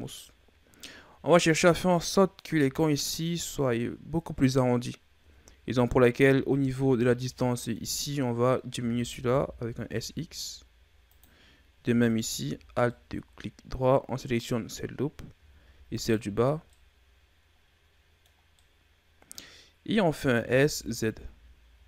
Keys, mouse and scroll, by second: 0.2-3.2 middle drag, 5.4-6.2 scroll up 2, 6.2 Tab, 7.0-7.4 scroll up 3, 7.4-8.8 middle drag, 8.8 s, 12.1 alt+right click, 12.6-12.9 scroll down 1, 12.9-15.9 middle drag, 15.9 alt+shift+right click, 16.7-20.4 middle drag, 20.4 s.